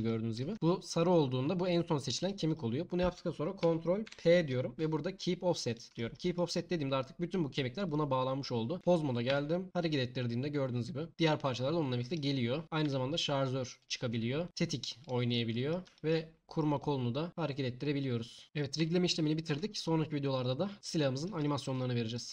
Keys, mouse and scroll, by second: 4.0 ctrl+p, 8.4 click, 8.8 Tab, 8.8 g, 9.3 g, 12.8 g, 14.5 r, 18.4 n, 18.8 Tab.